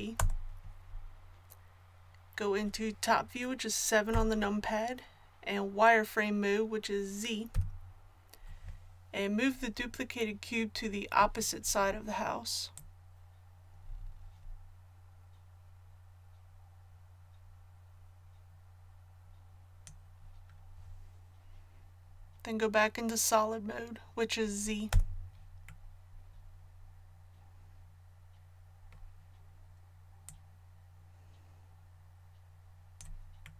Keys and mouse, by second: 4.1 KP_7, 7.5 z, 12.7-14.5 drag, 24.9 z, 27.0 click, 30.3-33.5 drag.